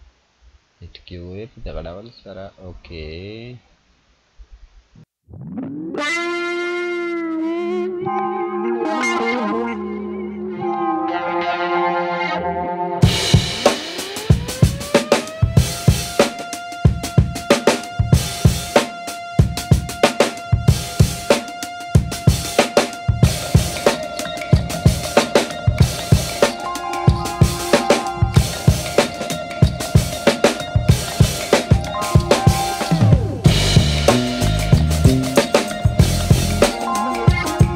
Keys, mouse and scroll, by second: 4.8-8.2 drag, 14.0 click, 16.9-17.9 scroll up 2, 18.5-24.4 drag, 24.8 scroll up 1, 27.5-31.3 drag.